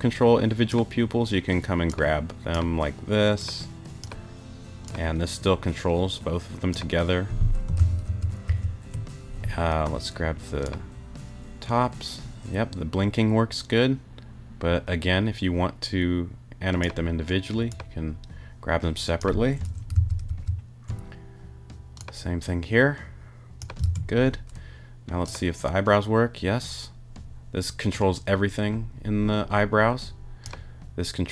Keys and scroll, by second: 7.8 super+z, 19.9 super+z, 23.8 super+z.